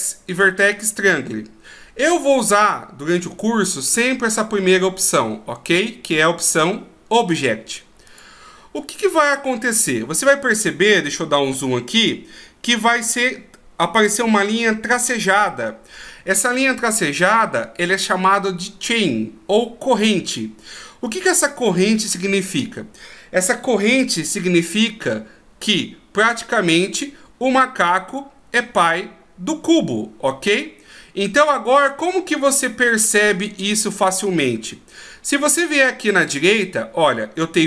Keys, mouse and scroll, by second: 10.5 middle click, 11.7-12.5 scroll up 2, 14.0 scroll up 1, 21.1-24.4 scroll down 1.